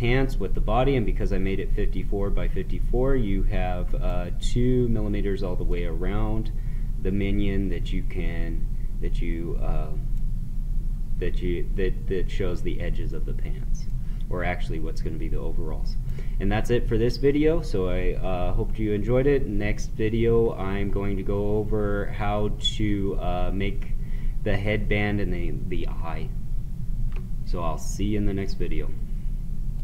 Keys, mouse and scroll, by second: 0.5-12.7 right drag, 13.9-18.7 right drag, 29.7 click.